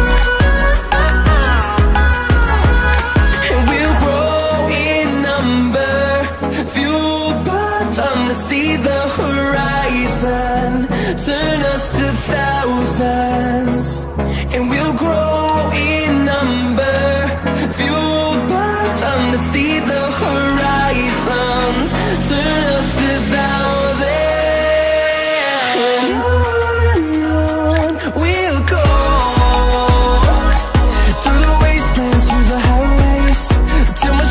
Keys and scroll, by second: 8.5 Return, 25.9 ctrl+j, 28.6 ctrl+t, 34.1 Return.